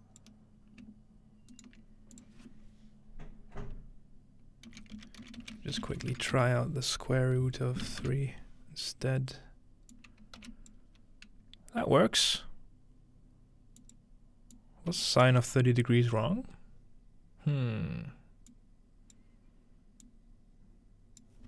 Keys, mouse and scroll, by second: 4.7-6.3 typing, 7.9 3, 9.9 click, 10.4 m, 13.8-16.5 drag, 18.5-19.2 drag, 20.1-21.2 drag.